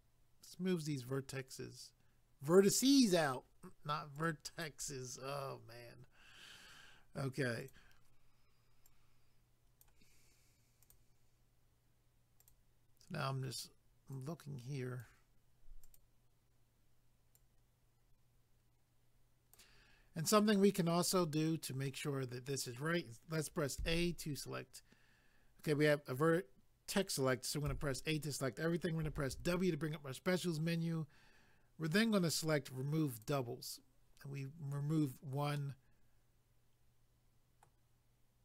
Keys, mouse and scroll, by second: 0.6 scroll up 2, 4.2 click, 7.6 click, 8.8 click, 10.8 click, 14.1 click, 15.8 click, 19.9 scroll down 1, 21.9 middle click, 23.8 a, 33.2 click, 35.6 middle click.